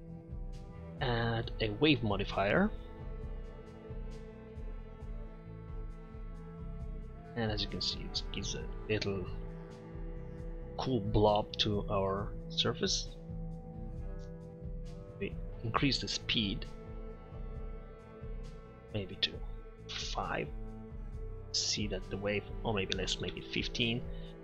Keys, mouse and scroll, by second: 7.2-8.2 middle drag, 8.4 middle drag, 10.3-10.7 middle drag, 13.4 click, 16.1-18.0 drag, 18.7 click, 20.5 middle click, 24.1-24.4 middle drag.